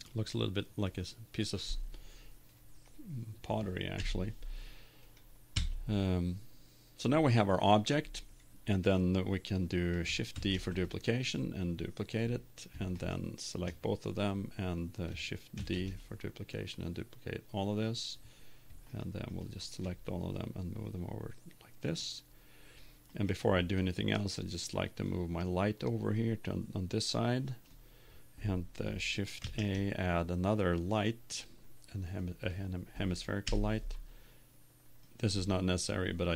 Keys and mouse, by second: 1.0 click, 1.4-3.1 middle drag, 4.1 KP_7, 5.5 Tab, 6.5-8.5 middle drag, 10.3 shift+d, 11.3 click, 13.4-14.5 right drag, 15.5 shift+d, 16.0-18.5 drag, 19.0-20.4 right drag, 21.2-22.3 drag, 23.1-25.1 right drag, 24.3-27.7 drag, 29.6 shift+a, 33.6 KP_1, 35.1 click, 35.9 right click.